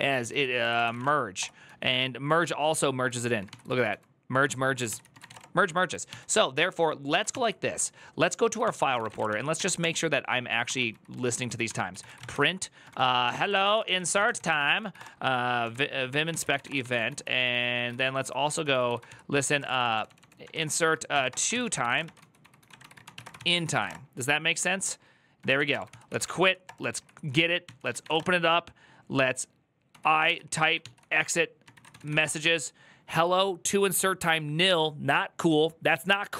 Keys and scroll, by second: 0.0-5.5 typing, 5.8 ctrl+t, 7.1 ctrl+n, 8.8 ctrl+t, 8.8 typing, 8.9 Return, 9.0 ctrl+d, 9.3 ctrl+d, 10.4-14.8 typing.